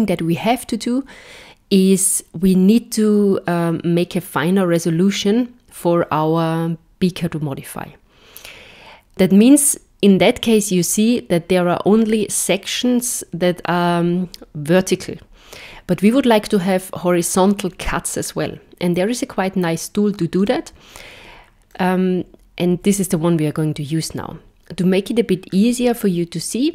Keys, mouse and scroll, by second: 20.4 click, 21.7 middle click.